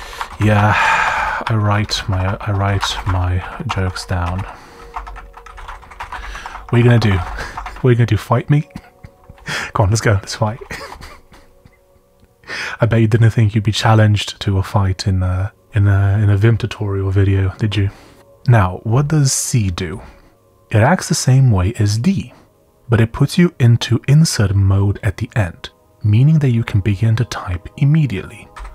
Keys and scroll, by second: 0.0-8.1 typing, 10.8 Escape, 15.6 d, 15.6 d, 25.4 typing, 28.5 typing.